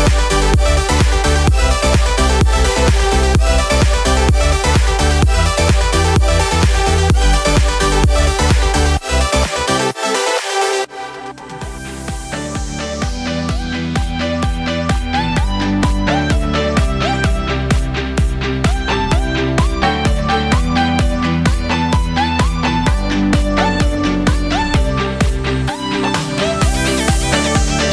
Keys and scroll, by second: 6.8 ctrl+j.